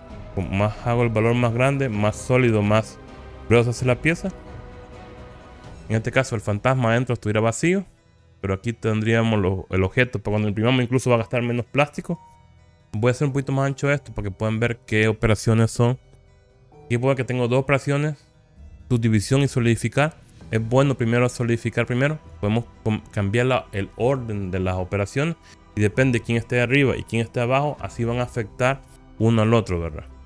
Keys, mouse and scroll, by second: 0.8 middle click, 1.8 middle click, 2.9-3.6 scroll up 3, 3.6-6.7 middle drag, 13.4-16.9 drag, 22.3 click.